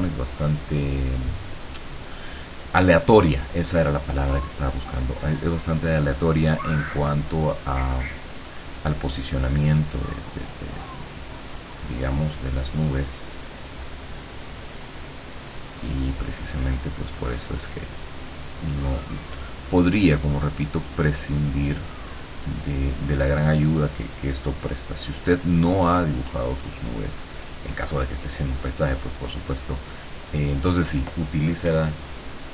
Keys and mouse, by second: 0.6 click, 1.5-2.8 drag, 5.2-6.5 drag, 6.8-8.8 drag, 9.0-10.1 drag, 10.8-15.0 drag, 15.6 click, 16.0 click, 17.5 click, 20.4-25.8 drag, 26.9 click, 27.4 click, 28.2 click, 29.8 click.